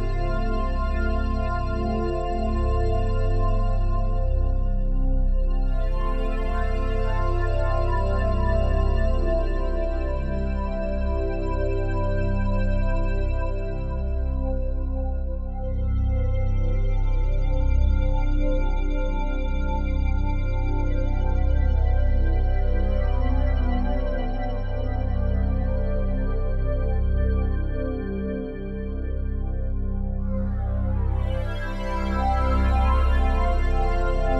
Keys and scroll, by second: 8.0 ctrl+g, 15.7 ], 20.4 ctrl+z.